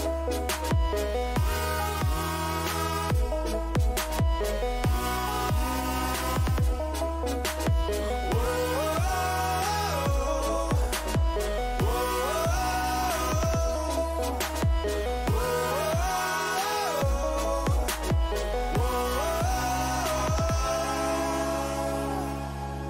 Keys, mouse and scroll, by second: 10.3 middle click, 10.8 click, 12.3-13.7 middle drag, 14.9 z, 15.6-17.5 middle drag, 20.9-22.8 middle drag.